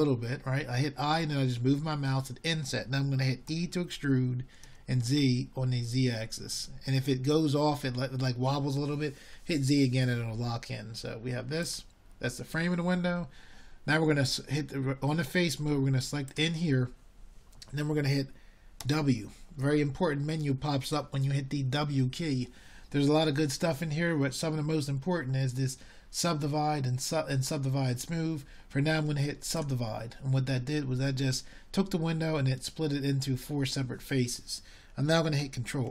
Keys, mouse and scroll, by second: 1.0 shift+a, 7.7 i, 14.8 e, 30.4 w.